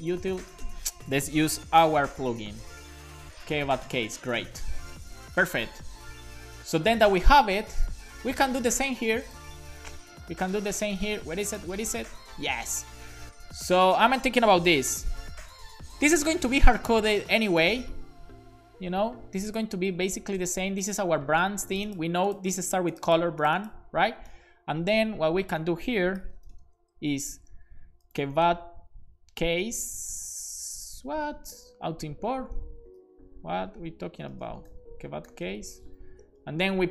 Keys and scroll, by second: 0.3 BackSpace, 1.9 shift+super+h, 3.1-4.1 typing, 4.2 super+s, 4.7 Right, 4.9 Right, 15.0 shift+[, 15.5 super+Right, 16.0 BackSpace, 16.2 shift+], 16.8 Left, 17.8 space, 20.2-20.9 typing, 26.3 shift+4, 26.5 shift+], 26.8 Left, 27.9-29.0 typing, 33.0 b, 34.3-36.1 typing, 36.5 super+v.